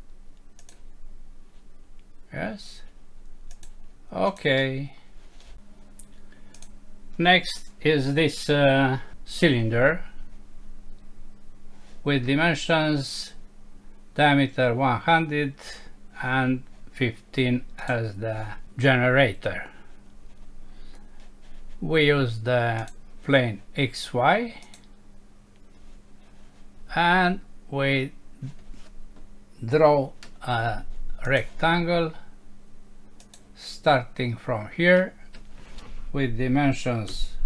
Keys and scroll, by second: 4.6 F6.